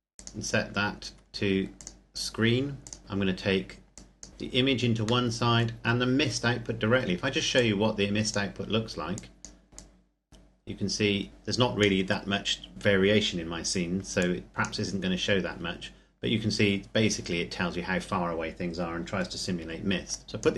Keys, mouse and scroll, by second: 1.1-1.7 scroll up 1, 1.7 click, 3.0-3.9 scroll down 1, 3.9 click, 5.3 middle click, 5.8-7.6 scroll up 1, 7.6 click, 10.0 click, 14.2 click, 20.1 click.